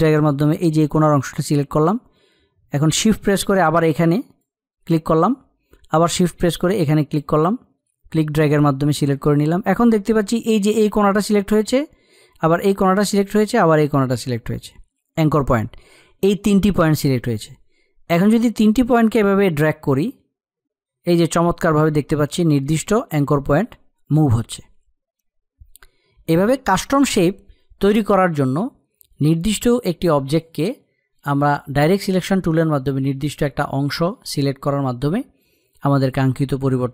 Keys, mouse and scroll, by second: 20.7-36.9 drag.